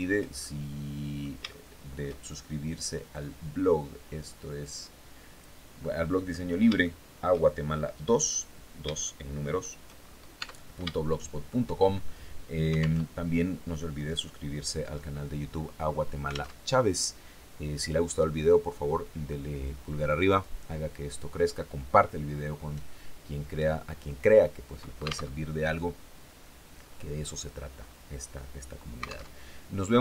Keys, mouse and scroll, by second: 0.9 shift+middle click, 2.5-5.0 drag, 5.2 click, 6.3 shift+click, 7.0-7.4 shift+scroll up 1, 7.7 click, 9.4-9.7 shift+scroll down 1, 9.8 Tab, 10.4 shift+click, 12.4 alt+Tab, 16.0 alt+Tab, 24.7 alt+Tab, 27.2 scroll down 2, 28.8 alt+Tab, 29.1-29.4 scroll down 2, 29.7 shift+click.